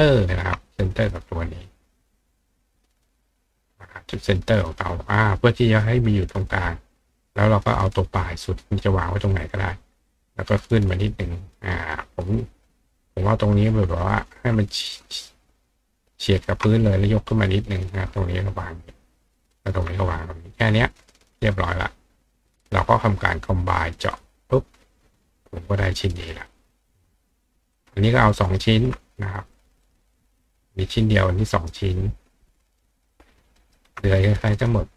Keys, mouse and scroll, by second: 0.6 click, 1.3 click, 1.7 click, 2.4-4.8 drag, 6.5-8.5 ctrl+drag, 9.7-11.7 ctrl+drag, 11.6 ctrl+right click, 12.3 click, 13.6 ctrl+click, 15.0 ctrl+click, 16.3-17.4 ctrl+drag, 17.4 right click, 17.6 click, 17.7 right click, 18.2-19.7 ctrl+drag, 20.1 click, 20.9-21.5 drag, 24.2 click, 25.5 click, 26.1 click, 26.6 click, 27.8-28.8 ctrl+drag, 28.3 ctrl+right click, 29.6 ctrl+click, 29.8 ctrl+right click, 32.3 ctrl+click, 33.1 ctrl+click, 33.6 ctrl+right click, 34.6-34.9 drag.